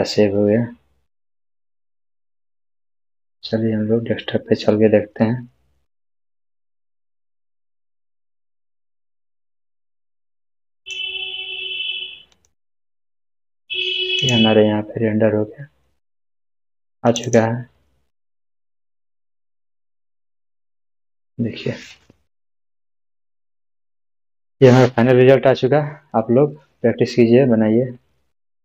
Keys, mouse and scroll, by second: 10.9 click, 19.2 click.